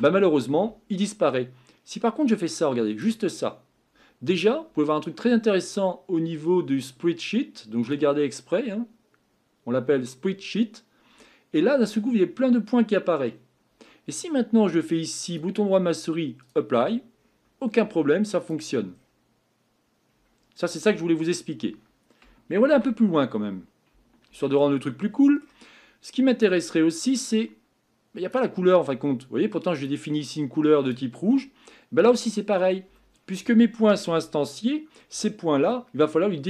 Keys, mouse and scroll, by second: 3.0 click, 16.5 click, 17.2-17.9 scroll up 5, 17.9-18.5 scroll up 5, 18.5 click, 18.9-20.1 scroll down 5, 20.1 scroll down 2, 22.7 ctrl+z, 29.8 click.